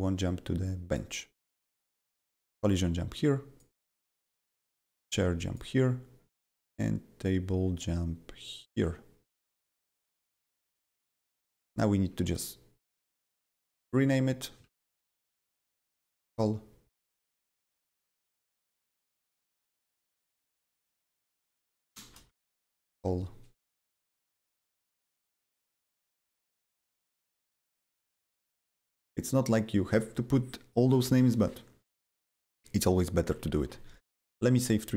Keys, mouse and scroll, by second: 2.4-11.7 drag, 11.7 click, 12.2 click, 13.0 ctrl+c, 13.3 click, 13.8 click, 14.6 ctrl+v, 15.3-16.5 typing, 18.2 click, 18.9 click, 19.6 ctrl+c, 19.9 click, 20.4 click, 21.1 ctrl+c, 21.1 click, 21.2 ctrl+v, 21.8-22.9 typing, 24.8 click, 25.7 click, 26.6 ctrl+c, 27.5 click, 28.1 click, 28.9 ctrl+v, 29.2 click, 33.6 ctrl+s.